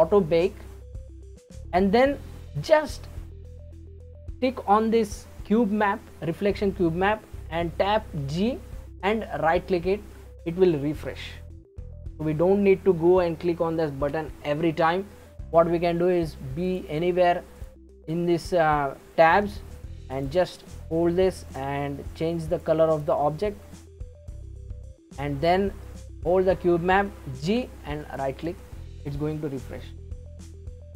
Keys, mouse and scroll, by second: 2.8 click, 8.3 g, 16.7 click, 17.6 click, 20.1 click, 21.5 click, 22.5 click, 26.1 click, 27.5 g.